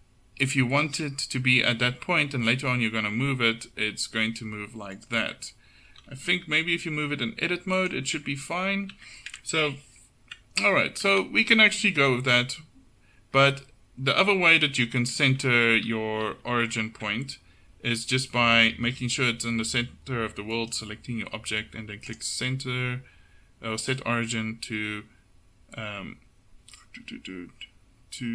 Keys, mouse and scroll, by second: 2.9 g, 5.3 Tab, 6.0 a, 6.2 a, 6.4 g, 8.2 Tab, 9.0 Tab, 9.8 ctrl+z, 10.8 Tab, 11.3 ctrl+z, 11.7 ctrl+z, 12.4 Tab, 14.3 Tab, 14.8 ctrl+z, 15.5 ctrl+z, 16.0 ctrl+z, 16.3 ctrl+z, 16.6 ctrl+z, 20.6-22.2 right drag.